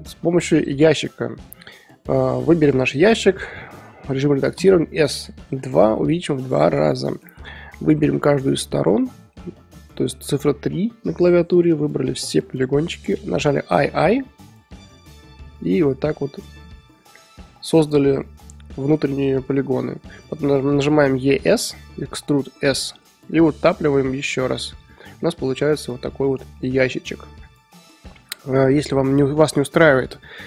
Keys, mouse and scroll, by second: 0.8-1.5 middle drag, 1.5-2.6 scroll up 3, 2.6 scroll down 3, 2.8 middle click, 3.1 Tab, 4.5 s, 5.9-7.8 middle drag, 7.8 3, 9.1-13.5 middle drag, 16.5-21.4 middle drag, 21.4 e, 24.4-26.4 middle drag, 26.4 scroll up 1, 26.5-29.1 middle drag, 29.1-30.4 scroll up 1.